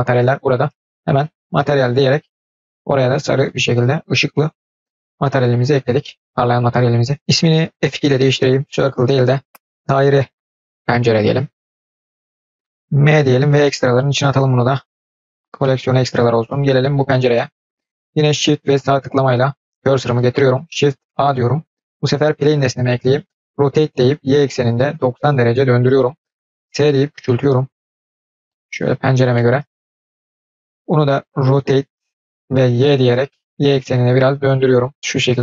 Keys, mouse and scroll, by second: 3.2-4.3 drag, 5.4 click, 7.8 F2, 14.9-15.4 scroll down 1, 15.4-16.7 middle drag, 17.2 middle click, 18.6 shift+right click, 20.9 shift+a, 29.2-29.5 middle drag, 29.5-29.9 scroll down 3, 29.9-30.5 middle drag, 30.6 scroll up 1, 31.4 r.